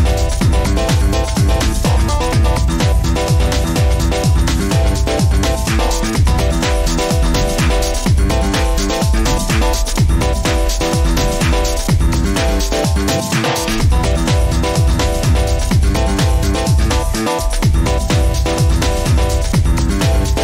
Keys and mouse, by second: 14.3 Tab, 14.7 Tab, 16.1 t, 16.8 middle click, 19.6 alt+shift+click.